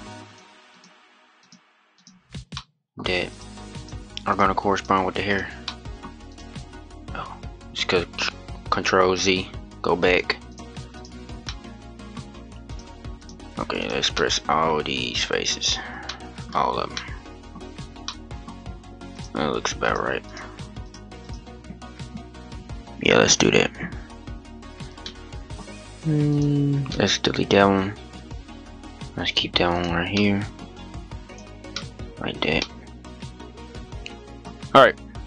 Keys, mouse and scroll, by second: 0.0 shift+click, 1.1-2.3 shift+drag, 2.3 middle click, 3.0 shift+click, 3.5 shift+click, 4.0 shift+click, 4.5 shift+click, 5.0 shift+click, 5.4 middle click, 6.0 click, 8.9 ctrl+z, 10.2 shift+click, 10.7 shift+click, 11.2-12.4 middle drag, 12.4 shift+click, 12.9 shift+click, 13.5 shift+click, 13.9-14.9 middle drag, 14.9 shift+click, 16.4 middle click, 17.3-17.8 scroll down 1, 17.8-18.9 middle drag, 18.9 shift+click, 19.6 shift+click, 20.0 shift+click, 20.6 shift+click, 21.0-24.0 shift+drag, 24.2 scroll up 1, 24.4 scroll down 1, 24.7 scroll up 1, 24.7 middle click, 25.3-26.0 scroll up 1, 26.0 shift+click, 26.6-29.0 middle drag, 29.0 shift+click, 29.5 shift+click, 29.9-31.0 middle drag, 31.0 shift+click, 31.5 middle click, 32.3-32.6 scroll down 1, 32.6-34.7 middle drag, 34.7-35.2 scroll up 2.